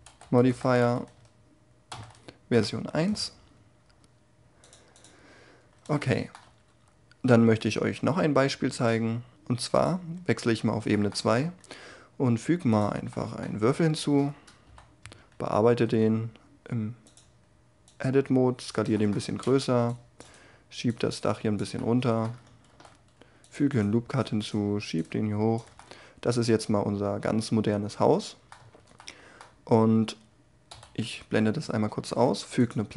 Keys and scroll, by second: 10.7 shift+a, 13.8 Tab, 14.6 3, 15.8 s, 19.2 a, 19.4 c, 22.7 ctrl+r, 28.1 Tab, 30.7 h, 31.9 shift+a.